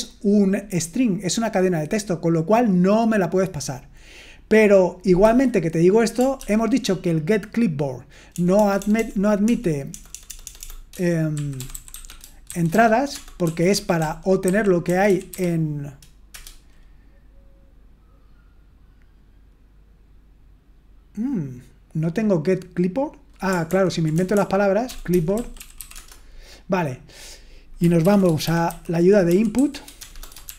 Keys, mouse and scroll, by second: 4.4 click, 5.2 q, 6.4 ctrl+p, 8.3-15.8 typing, 16.3 Return, 23.7 ctrl+p, 24.2-26.2 typing, 27.8-30.5 typing.